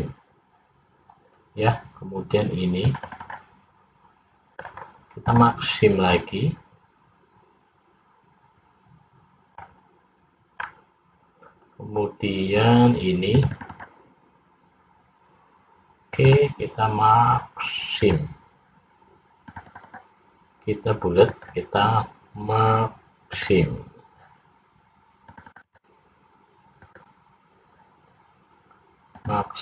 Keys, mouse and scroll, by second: 2.9 click, 3.8 click, 4.7 right click, 6.3 middle click, 10.8-12.2 scroll up 2, 13.4 click, 14.3 click, 16.3 right click, 19.5 click, 20.5 click, 21.3 right click, 25.3 click, 26.3 click, 26.9 right click.